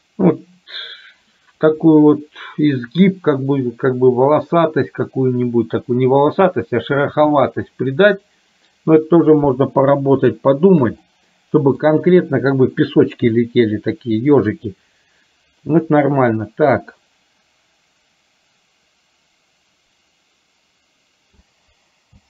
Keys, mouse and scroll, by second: 10.4 shift+middle click, 11.1 middle click, 17.1-21.7 drag.